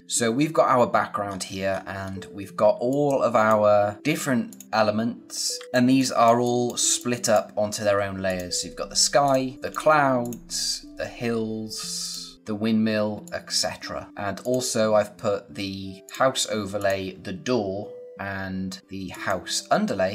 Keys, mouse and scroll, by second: 0.0 click, 1.2-1.9 scroll up 1, 2.6 space, 2.8 click, 3.1 space, 4.4 click, 5.5 d, 5.6 space, 6.9 click, 7.3 space, 7.5-8.2 scroll up 1, 8.2 click, 9.4 scroll down 1, 9.5 click, 12.3-13.0 scroll down 1, 13.0 space, 13.1 click, 13.5 space, 14.1 scroll up 1, 14.3 click, 19.0 click.